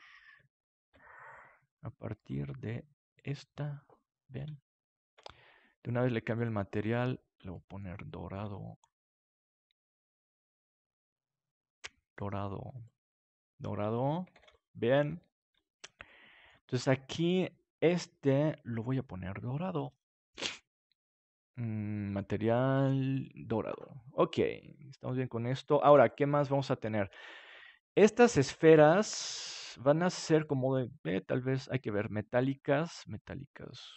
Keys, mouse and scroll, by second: 2.1-4.7 drag, 4.7-7.0 middle drag, 5.7-8.0 drag, 7.5-11.5 middle drag, 9.7-11.5 right drag, 10.4-14.7 drag, 12.1-13.8 right drag, 13.8 middle click, 14.3 ctrl+s, 22.4-25.1 drag, 25.1 middle click, 25.8 ctrl+s.